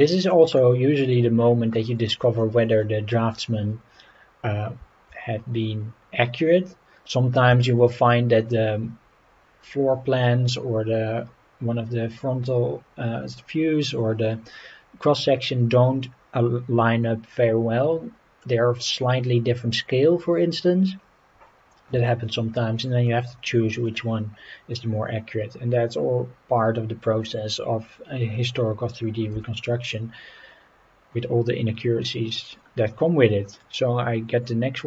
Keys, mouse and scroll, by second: 0.9 scroll up 2, 1.6 scroll up 3, 2.4-2.8 middle drag, 7.6-8.0 shift+middle drag, 13.3-13.8 middle drag, 15.7-18.4 middle drag, 20.9-21.2 scroll down 2, 22.0-22.5 shift+middle drag, 23.0-23.8 middle drag, 29.3 g.